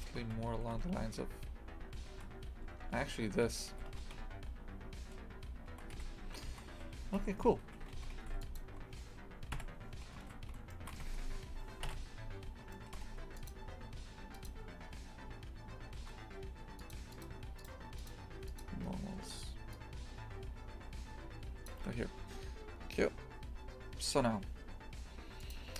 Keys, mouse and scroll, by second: 0.0 g, 3.8 g, 6.5 shift+f, 7.7 a, 7.9 shift+f, 9.5 KP_3, 10.7 shift+middle click, 11.0 Tab, 11.8 KP_Divide, 12.8 shift+middle click, 13.5 w, 18.5-25.7 drag.